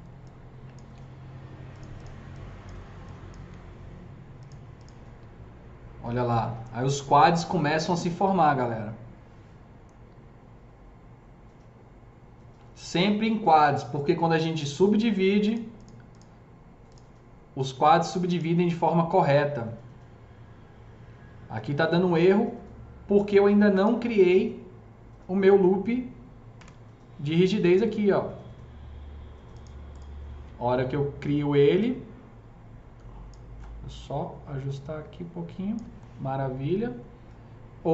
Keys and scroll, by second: 26.6 KP_0, 31.6 s.